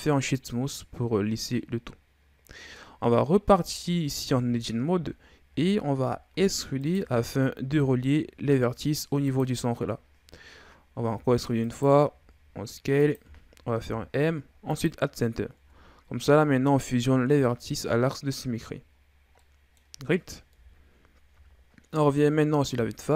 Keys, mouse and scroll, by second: 1.3 scroll down 1, 1.6-3.0 middle drag, 3.0-3.6 scroll up 3, 3.6 Tab, 4.2 middle click, 5.0-5.9 scroll up 2, 5.9-6.3 shift+scroll up 3, 6.3 e, 7.2 s, 11.1 e, 12.2 s, 13.8 m, 15.5 Tab, 16.1 scroll down 2, 16.4-17.7 middle drag, 17.7-19.0 scroll up 2, 19.0-19.4 scroll down 5, 19.4-20.5 middle drag, 20.5 KP_1, 21.7-22.8 scroll up 3, 22.8-23.1 shift+scroll up 2.